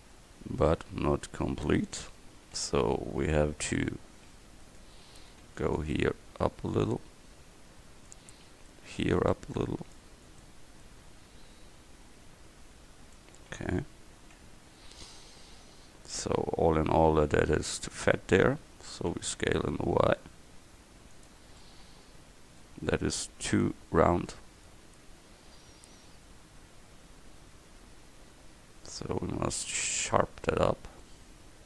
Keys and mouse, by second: 2.0 Tab, 3.5 c, 4.8-6.5 drag, 5.1 a, 5.5 c, 6.7-8.3 drag, 8.4 a, 8.5 c, 9.7 click, 13.6 a, 14.5 Tab, 19.2 s, 21.8-23.6 drag, 23.6 Tab, 24.4-25.4 drag.